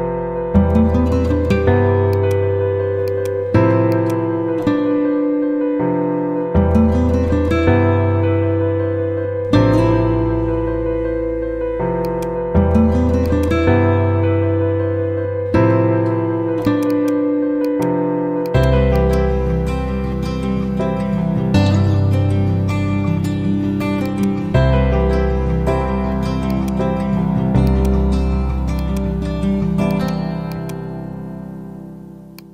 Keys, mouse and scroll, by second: 12.0-15.1 drag, 14.0 typing, 21.0 Down, 23.9 shift+click, 24.4-25.2 typing, 25.6 ctrl+z, 26.4 click, 29.5 ctrl+z, 29.8 click, 31.0 ctrl+z, 32.3 click.